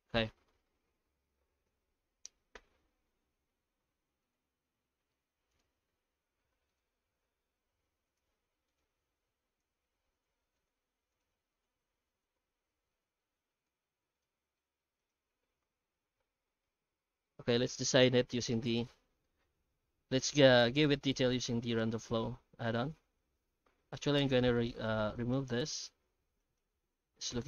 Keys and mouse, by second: 0.2-0.6 middle drag, 3.0 shift+middle drag, 4.2-13.0 drag, 13.2 middle drag, 13.6 z, 14.6 middle drag, 15.0 right click, 15.2 Tab, 15.6 alt+shift+z, 16.0 shift+middle click, 16.5 alt+a, 16.6 middle click, 17.4 Tab, 21.0 shift+middle drag, 21.4 Tab, 22.0 Tab, 22.7 Tab, 23.6 3, 24.1 alt+shift+right click, 25.1 alt+shift+right click, 25.8 alt+a, 26.4 alt+shift+right click, 27.3 ctrl+KP_Add.